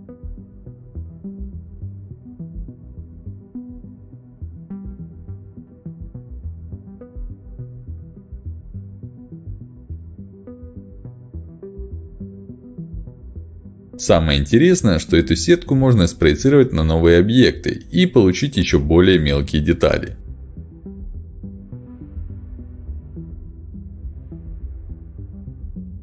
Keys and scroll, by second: 1.3 ctrl+alt+x, 3.6 ctrl+alt+x, 7.7 ctrl+alt+x, 9.1 ctrl+alt+x, 24.8 ctrl+shift+x, 25.6 Escape.